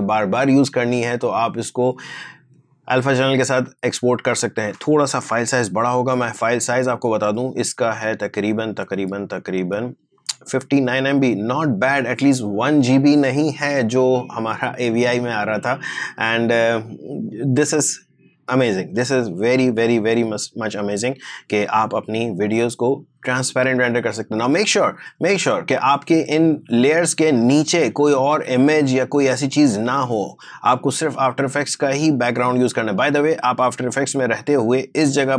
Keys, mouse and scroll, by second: 7.2 super+d, 7.5 right click, 8.8 click, 10.6-13.6 drag, 16.7-18.6 drag, 21.4 click, 24.8 click, 33.7-35.2 drag.